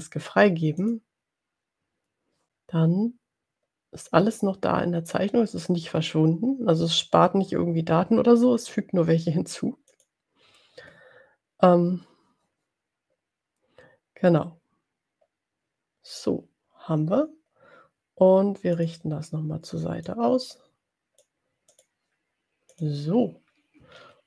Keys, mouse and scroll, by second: 1.0 click, 10.1 click, 18.8 click, 20.4-21.6 drag, 21.7 click, 22.7 click, 23.9-24.2 ctrl+scroll down 2.